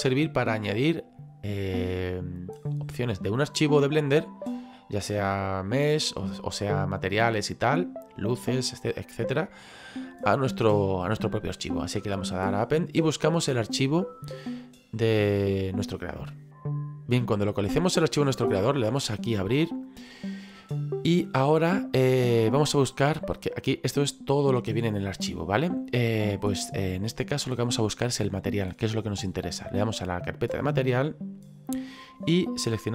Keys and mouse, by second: 12.3 click, 18.9 click, 30.7 click, 32.3 click.